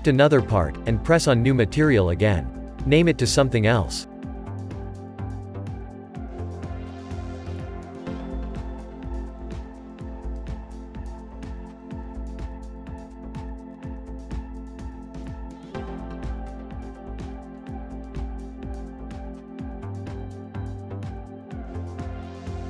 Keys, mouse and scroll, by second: 0.9-3.8 drag, 3.8 l, 4.8 scroll up 2, 5.4-7.2 middle drag, 7.2 click, 17.6 click, 17.8 scroll down 2, 18.4-22.6 shift+middle drag.